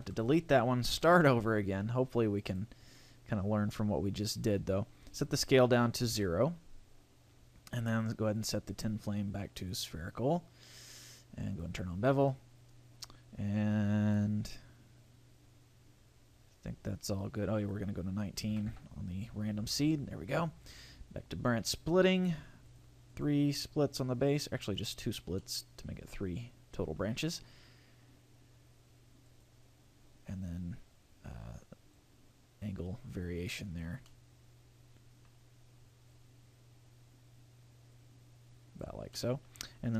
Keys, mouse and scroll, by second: 1.0 shift+a, 3.2-4.8 scroll down 3, 3.5-4.8 scroll up 1, 4.8 scroll up 2, 5.1 click, 7.8 click, 8.3 click, 11.5 click, 12.1-13.0 scroll down 3, 13.0 scroll up 1, 17.6 click, 19.6-20.1 scroll up 5, 20.6 click, 22.6 click, 23.1 click, 23.6 click, 24.9 click, 25.4 middle click, 29.3 click, 31.9 click, 34.0 middle click, 36.1 click, 39.1 middle click.